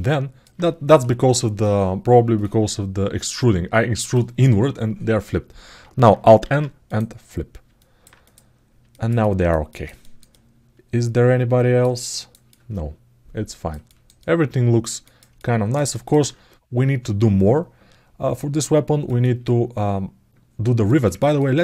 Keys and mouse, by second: 8.7 alt+middle click, 9.0 ctrl+alt+middle click, 9.5 ctrl+alt+middle click, 9.8 alt+shift+middle click, 10.1-11.6 alt+middle drag, 11.8 alt+shift+middle click, 12.3-13.5 alt+middle drag, 13.6 ctrl+alt+middle click, 14.0 alt+middle click, 14.8 alt+shift+middle click, 15.1 alt+middle click, 15.7 alt+shift+middle click, 18.3 alt+middle click, 19.0 ctrl+alt+middle click, 20.6 alt+shift+middle click, 20.9 ctrl+alt+middle click.